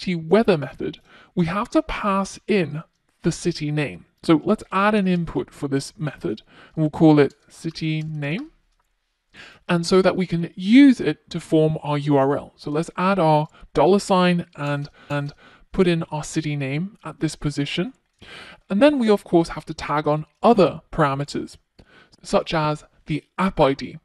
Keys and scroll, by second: 12.7 Return.